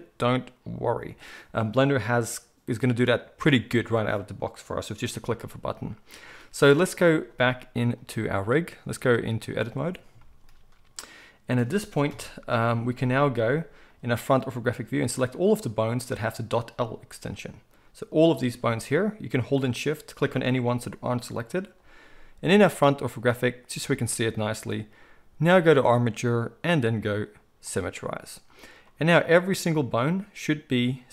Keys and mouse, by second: 7.9-19.5 drag, 12.1 KP_1, 17.1 g, 19.5-25.4 shift+middle drag, 20.6 g, 25.4-31.1 drag.